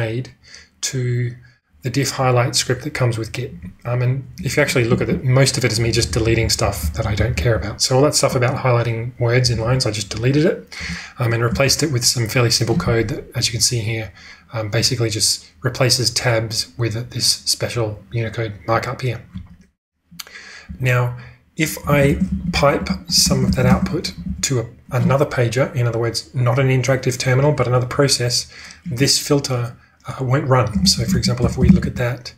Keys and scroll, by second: 5.0-7.5 typing, 9.4 typing, 10.8 g, 11.6 space, 20.6-24.1 typing, 30.7-32.3 typing.